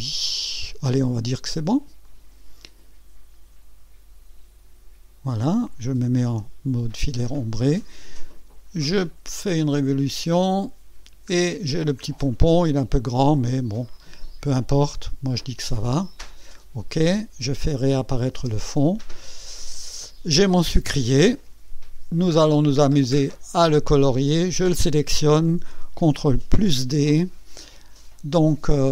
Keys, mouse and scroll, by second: 2.0 click, 8.9 click, 11.3-12.1 scroll down 3, 13.3 click, 18.1 click, 18.3 space, 19.4 click, 24.6 click, 26.5 ctrl+d.